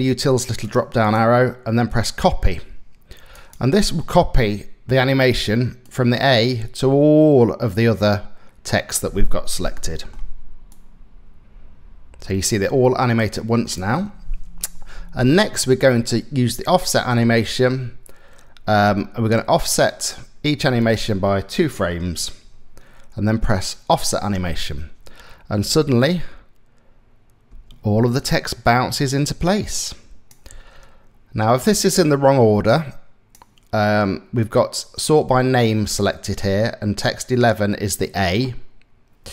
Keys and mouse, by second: 0.3 click, 0.7 click, 3.1-4.7 drag, 5.5-8.6 drag, 9.4 shift+middle click, 10.3-13.4 drag, 20.4-21.6 drag, 23.6 click, 25.2 space, 27.1 space, 28.3-30.0 drag, 30.1 space, 32.0 space, 32.3 click.